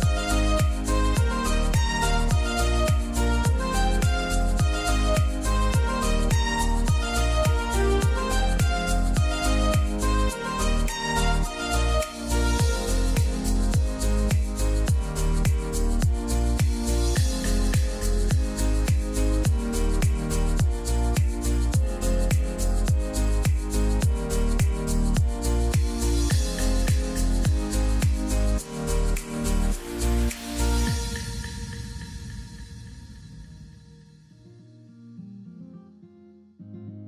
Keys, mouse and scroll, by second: 5.5 click, 7.7 click, 10.0 right click, 10.1 right click, 10.5 click, 11.9 scroll up 2, 14.3-16.1 scroll down 1, 16.1-18.8 drag, 20.8-22.9 scroll up 1, 22.9 click, 25.9-28.3 scroll down 1, 28.3 click, 30.7 click, 31.5 ctrl+z, 32.7 click, 36.0 click.